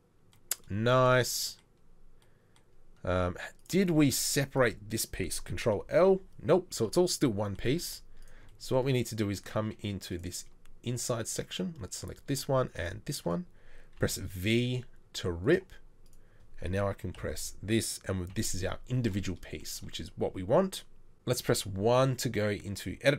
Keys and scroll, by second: 5.8 ctrl+l, 7.9 z, 14.2 v, 17.3 ctrl+l, 18.3 KP_3, 21.5 1.